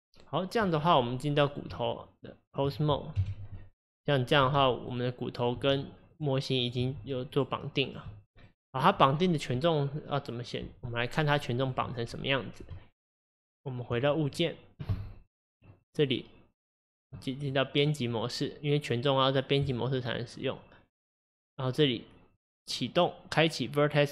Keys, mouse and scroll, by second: 0.6 click, 1.4 click, 1.8 Tab, 3.2 KP_1, 3.8 click, 4.5 r, 5.4 click, 5.6 r, 6.7 click, 6.9 r, 7.9 click, 8.1 r, 11.3 click, 11.6 click, 12.8 Tab, 14.3 click, 15.7-17.5 drag, 17.8 click, 18.1-21.2 drag, 21.3-24.1 drag.